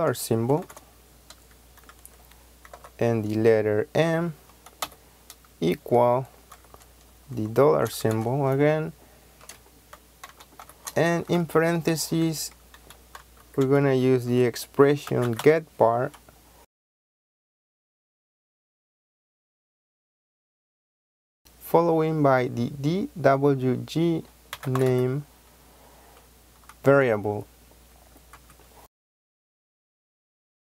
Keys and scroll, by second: 0.5 shift+4, 2.6 m, 7.9 shift+4, 10.2 shift+9, 10.5 shift+0, 11.3 Left, 13.1-15.8 typing, 18.5-19.8 typing, 24.2-25.3 typing, 28.2 Right.